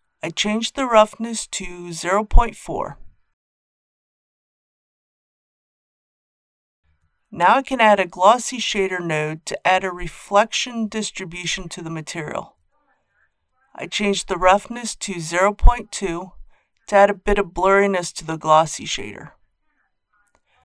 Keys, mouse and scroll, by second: 3.4 KP_Decimal, 3.7 KP_4, 6.8 click, 8.0 shift+a, 9.9 click, 18.4 KP_Decimal, 18.6 KP_2.